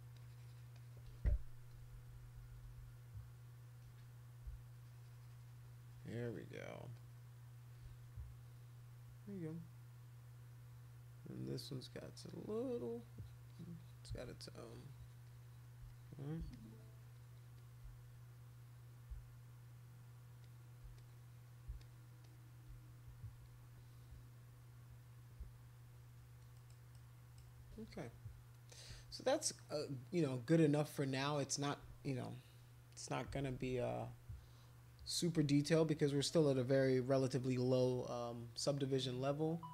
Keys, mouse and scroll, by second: 0.1 shift+click, 0.7 shift+click, 1.7-2.8 typing, 4.7 shift+click, 5.6 shift+click, 6.2 shift+click, 6.9 shift+click, 7.3 shift+click, 11.7 click, 11.9 click, 12.1 click, 12.7 click, 12.9 click, 13.2 click, 13.5 click, 13.7 click, 14.2 shift+click, 14.4 shift+click, 15.2 shift+click, 15.4 shift+click, 15.9 click, 16.1 click, 16.5 shift+click, 17.1 shift+click, 17.4 shift+click, 17.5 shift+click, 18.4 click, 18.6 click, 18.9 click, 20.4 shift+click, 21.0 click, 21.4 click, 21.8 shift+click, 22.2 shift+click, 22.4 shift+click, 26.5 shift+click, 26.9 shift+click, 29.2-30.3 drag, 33.3 [, 33.5 [, 33.6 [, 33.8 [.